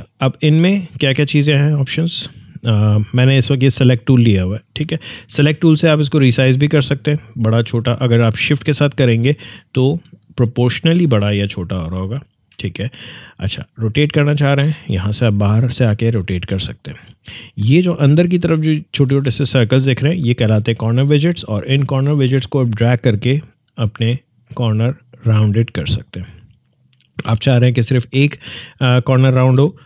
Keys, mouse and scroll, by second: 0.4-4.0 drag, 6.2-14.3 drag, 14.3-16.3 drag, 16.3 ctrl+z, 22.3-29.4 drag.